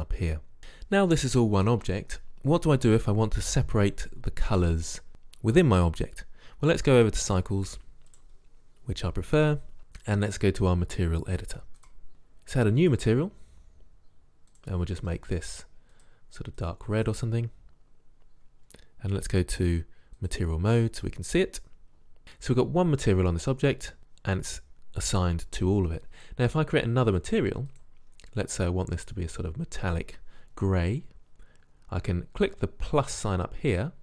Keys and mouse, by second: 7.4-8.6 drag, 11.9-12.7 drag, 13.0-16.6 drag, 19.4-21.2 drag, 27.9-29.7 drag.